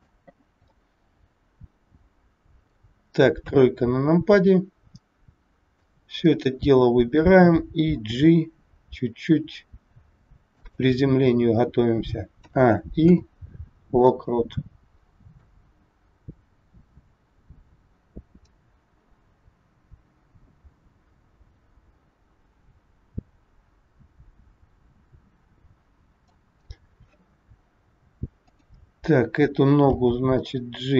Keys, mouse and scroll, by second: 0.6 middle click, 3.4 KP_3, 4.8 scroll down 1, 5.6 click, 5.6 scroll down 1, 7.9 g, 13.0 a, 13.0 i, 15.4 click, 28.4 click, 29.9 g.